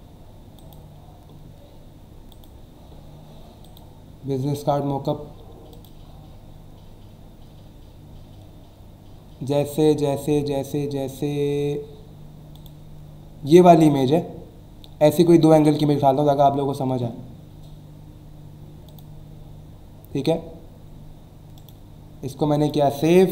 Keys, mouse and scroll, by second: 0.6 click, 2.3 click, 3.6 click, 4.4 scroll down 1, 5.0 scroll down 1, 5.7 click, 6.7 scroll down 1, 7.3 scroll down 1, 8.3 scroll down 1, 9.9 scroll down 1, 10.4-11.0 scroll down 2, 11.7 scroll down 1, 12.5 click, 14.0-14.8 scroll down 2, 17.5 scroll down 1, 18.9 click, 21.6 right click, 22.6 click.